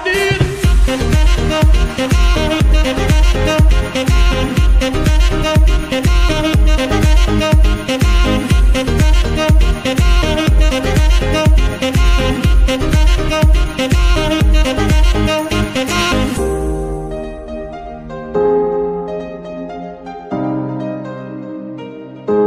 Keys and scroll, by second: 2.1 g, 3.2 r, 6.0 g, 6.5 r, 7.6 g, 9.3 r, 9.7 g, 10.5 r, 14.9 z, 16.7 KP_1, 17.9 g, 18.2 y, 18.5 x, 21.1 KP_7, 21.9 z.